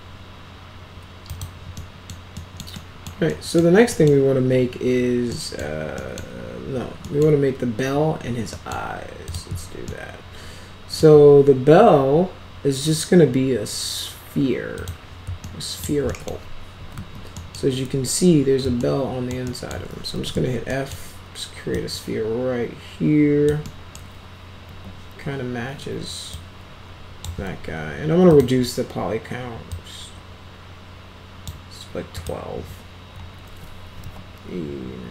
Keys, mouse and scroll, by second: 1.2 click, 1.7-2.0 middle drag, 2.3 middle click, 2.7-3.0 middle drag, 3.2 middle click, 3.9 middle click, 5.3 middle drag, 5.9 middle click, 7.0 middle click, 8.4 middle click, 9.2 click, 9.8-10.9 alt+middle drag, 14.7 click, 15.4 alt+middle click, 16.0 middle click, 16.4-17.4 typing, 17.3 middle click, 18.7 alt+middle click, 19.4 alt+middle click, 19.8-20.8 typing, 20.6 middle drag, 20.8 scroll up 2, 20.9-21.5 scroll down 2, 21.7-23.4 drag, 23.6 middle click, 24.6 w, 26.2 click, 28.2 click, 28.7 scroll down 2, 29.2 scroll up 2, 29.7-31.4 drag, 32.1 click, 33.9 e.